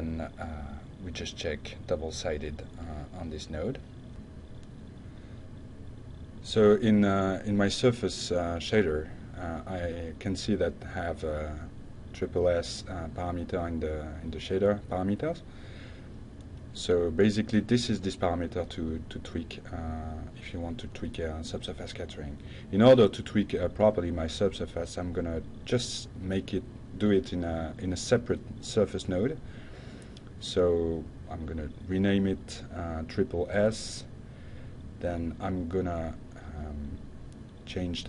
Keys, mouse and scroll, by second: 0.8 click, 2.3 click, 3.4 click, 4.9-5.6 drag, 5.8-6.4 drag, 6.7 click, 7.8 click, 18.0 click, 18.5 click, 19.5-21.0 typing, 21.1 Down, 23.0-23.7 drag, 24.0-25.0 drag, 25.2 click, 29.3 click, 30.1 click, 31.3 click, 32.6 shift+s, 33.2 Return, 35.0 click, 35.3 drag.